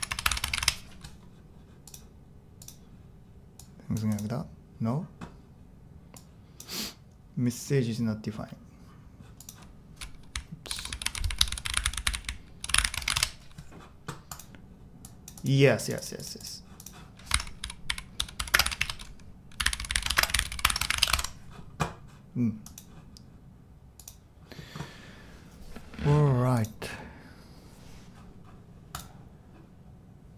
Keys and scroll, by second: 0.0-0.6 typing, 0.3 Escape, 0.6 Return, 10.0-13.6 typing, 16.5-21.4 typing, 28.1 typing.